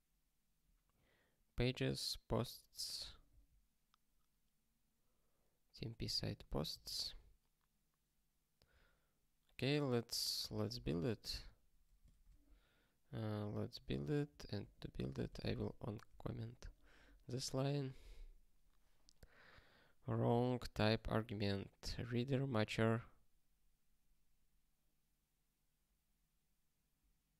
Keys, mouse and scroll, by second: 3.2 ctrl+n, 6.6 ctrl+n, 11.0 ctrl+k, 12.1 alt+shift+., 14.6 click, 14.9 ctrl+space, 15.0 ctrl+a, 15.2 alt+;, 15.6 ctrl+s, 16.2 ctrl+k.